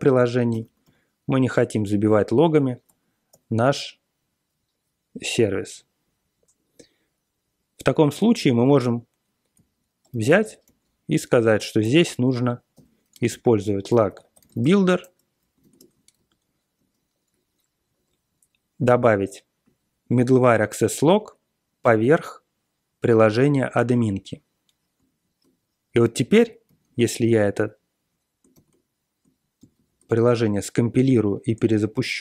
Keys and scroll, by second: 0.0 ctrl+п, 0.5 super+space, 0.8 ctrl+g, 2.8 ctrl+a, 3.3 ctrl+k, 9.5-15.1 typing, 10.3 alt+m, 11.1 Tab, 15.6 ctrl+e, 15.7 Return, 16.1 ctrl+y, 16.8 Tab, 26.7 ctrl+c, 26.8 ctrl+c, 28.5 ctrl+g, 29.6 ctrl+c.